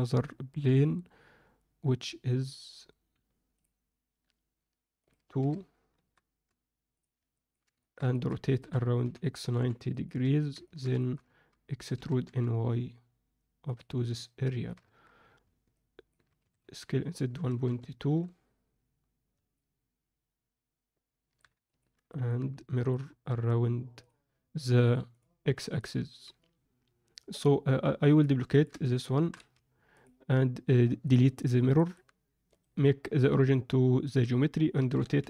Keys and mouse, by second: 5.1-6.1 drag, 7.3 ctrl+alt+middle click, 7.8 alt+shift+middle click, 8.1 ctrl+alt+middle click, 8.6 r, 10.2 Tab, 10.6 ctrl+middle click, 10.9 alt+shift+middle click, 11.9 e, 14.2 middle click, 14.8 Tab, 15.8 alt+middle click, 16.4 s, 19.5-21.3 alt+middle drag, 21.6 ctrl+alt+middle click, 22.0 middle click, 22.9-24.0 drag, 25.1 click, 28.0 middle click, 28.4 ctrl+middle click, 29.2 shift+d, 31.7 middle click, 32.4-34.0 right drag, 34.8 r.